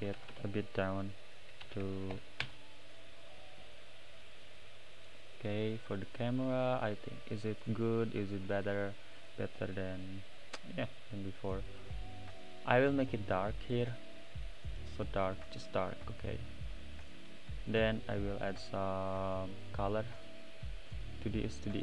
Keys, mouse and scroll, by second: 0.1 BackSpace, 0.3 BackSpace, 3.8-5.8 middle drag, 5.8 click, 8.6 click, 9.2 click, 11.9 click, 13.7 click, 15.9 click, 16.5 middle click, 17.0-17.7 scroll up 5, 17.7 click, 18.3 middle click, 18.9 click, 19.5 click.